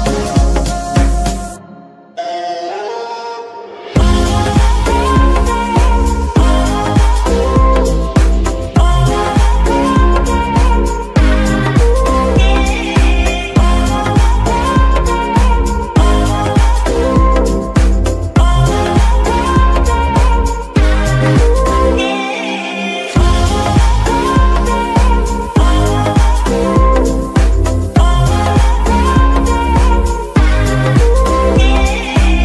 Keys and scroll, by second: 2.5 shift+s, 5.3 F2, 6.4-8.9 typing, 9.5 Return, 28.1-29.0 typing, 30.1-32.4 typing.